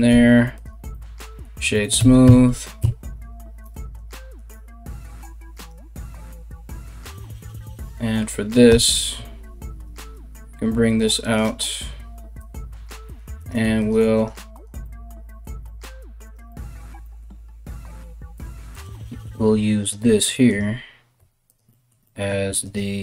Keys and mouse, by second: 1.6 KP_1, 1.8 Tab, 2.4 Tab, 3.3 Tab, 5.1 right click, 8.3 g, 10.9 right click, 11.1 g, 12.4 g, 13.0 right click, 13.1 g, 13.7 right click, 13.9 g, 15.8 right click, 16.9 g, 18.4 right click, 18.9 g, 20.1-22.9 right drag, 20.8 g, 22.1 g, 22.9-23.0 middle drag.